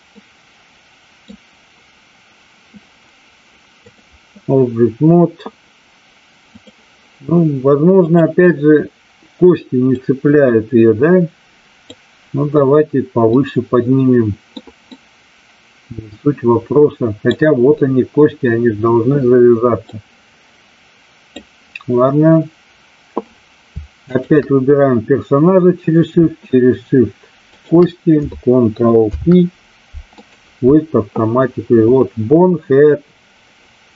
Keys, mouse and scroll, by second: 0.0-1.3 middle drag, 3.7 click, 6.6 click, 7.9 click, 10.0-11.8 drag, 13.3-14.6 middle drag, 14.9-17.3 middle drag, 19.8-21.4 drag, 24.0 shift+click, 27.4 shift+click, 28.9 ctrl+p.